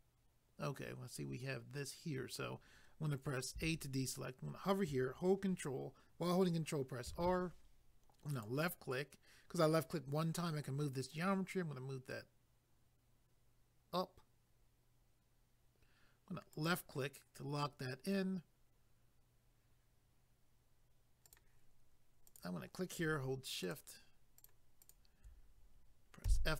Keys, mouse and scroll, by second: 7.1 ctrl+r, 8.3 click, 16.5 click, 21.2 click, 22.3 click, 23.7 shift+click, 24.4 shift+click, 24.9 shift+double click, 26.3 f.